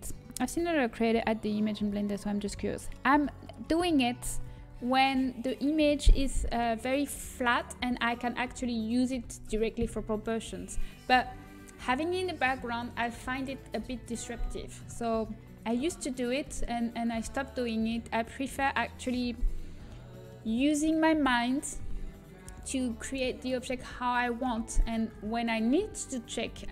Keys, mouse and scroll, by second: 4.8-6.8 middle drag, 7.8-9.7 middle drag, 11.9-14.4 middle drag, 15.2 middle click.